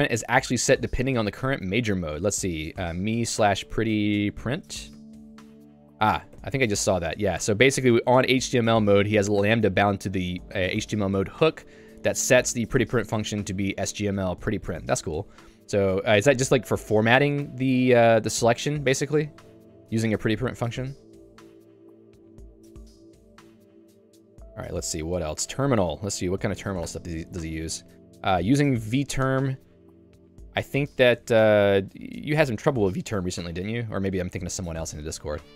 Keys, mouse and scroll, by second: 2.1-4.6 typing, 5.4 Return, 5.8 n, 6.4 shift+n, 7.5 shift+v, 9.3 Escape, 9.8-10.8 l, 16.4 h, 19.3 j, 19.8 ctrl+d, 20.8 ctrl+d, 21.7 j, 23.1 k, 23.4 shift+Tab, 24.1 shift+Tab, 24.7 ctrl+d, 25.4 k, 26.6 Home, 26.9 Tab, 27.4 j, 30.1 ctrl+d, 33.7 ctrl+d.